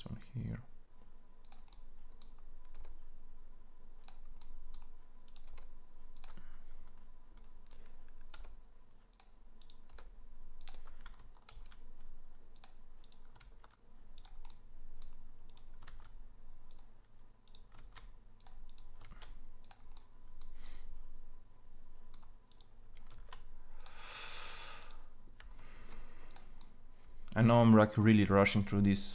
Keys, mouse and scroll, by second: 0.5 e, 2.5 e, 5.2 e, 9.3 e, 11.3 ctrl+a, 11.3 e, 13.2 ctrl+a, 17.2 ctrl+a, 18.7 ctrl+a, 18.8 ctrl+a, 22.8 ctrl+a, 25.5 ctrl+a.